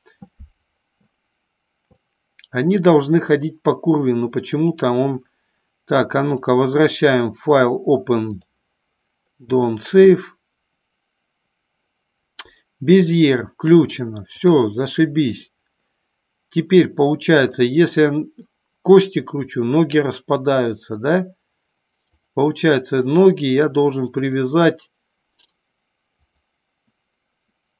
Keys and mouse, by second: 4.8 click, 6.4-10.8 drag, 14.4 click, 17.4 click, 22.3 click, 24.2-26.7 drag.